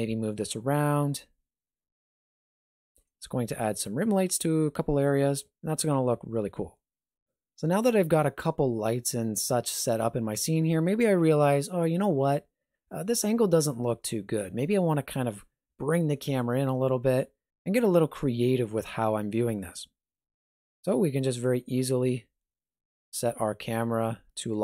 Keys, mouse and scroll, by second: 2.8 alt+shift+z, 20.4 n, 21.3 click, 22.0 n, 22.8 ctrl+middle click.